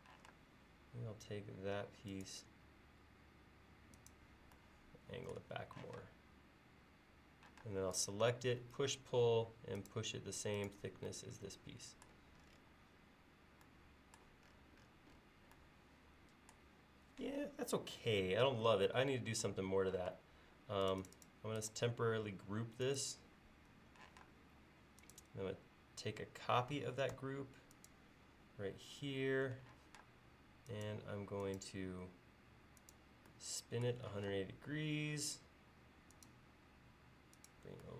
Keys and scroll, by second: 0.2 m, 5.9 p, 7.7 space, 20.2 space, 24.1 m, 29.9 q, 34.2 m.